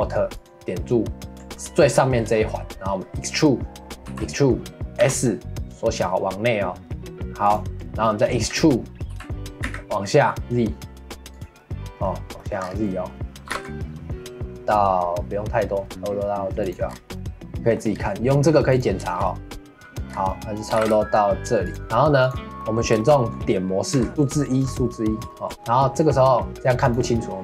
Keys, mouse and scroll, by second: 0.3-1.5 alt+drag, 1.5-4.1 middle drag, 4.1 e, 7.7 scroll down 1, 8.0-9.1 middle drag, 9.1 e, 11.6-12.6 middle drag, 12.6 scroll up 4, 12.8 middle click, 13.4 g, 16.8 scroll down 1, 17.1 middle click, 17.9-18.7 scroll down 1, 18.7 click, 19.0-20.1 shift+middle drag, 20.1 scroll up 1, 20.2 middle click, 20.7 g, 22.2 click, 22.6-23.9 middle drag, 23.9 1, 24.1 scroll up 3, 24.1 shift+middle click, 24.7 scroll up 2, 24.9 middle click, 25.5-26.8 middle drag, 26.8 click.